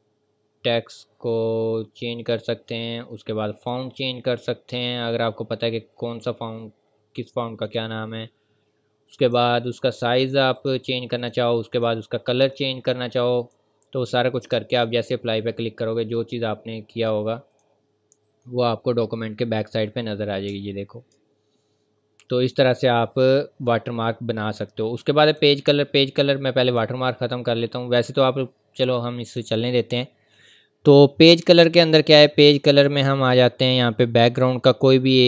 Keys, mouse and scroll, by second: 0.8-2.4 scroll down 1, 2.4 click, 4.1-7.6 scroll down 1, 7.6 click, 15.9-17.0 scroll up 1, 17.0 click, 18.1-18.5 scroll up 1, 18.5 scroll down 1, 20.6 scroll up 1, 21.2-22.0 scroll down 1, 23.4-23.9 scroll up 1, 25.3 click, 29.3 click.